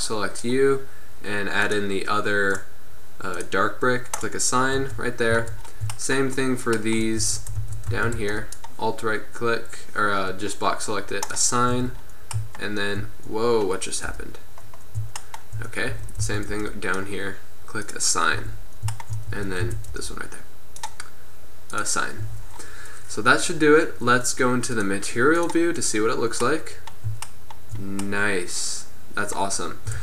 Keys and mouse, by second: 1.7-2.9 drag, 5.0 Tab, 5.4 z, 7.6 Tab, 7.7 a, 8.0 z, 8.4 b, 11.8 Tab, 14.1 KP_1, 16.1 Tab, 16.3 a, 16.6 b, 18.0 click, 18.4-19.6 drag, 18.5 Tab, 19.4 Tab, 19.7 a, 20.0 b, 21.8 click, 22.4 Tab.